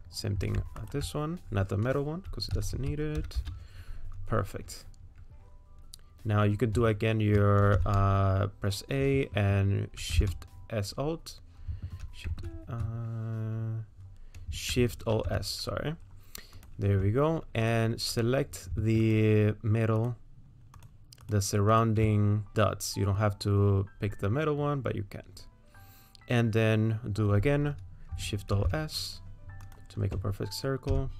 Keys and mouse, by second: 2.6 s, 7.8 a, 10.0 shift+s, 12.1 shift+s, 15.1 alt+shift+s, 18.2 click, 20.8 ctrl+click, 21.3 ctrl+click, 28.5 alt+shift+s, 30.9 a.